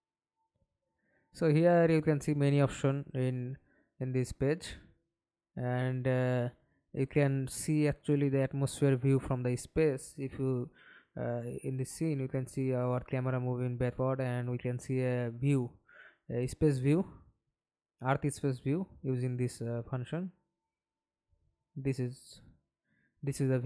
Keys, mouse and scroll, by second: 1.5-4.1 scroll up 54, 4.1 scroll down 1, 4.6-4.9 scroll up 8, 5.1 scroll down 3.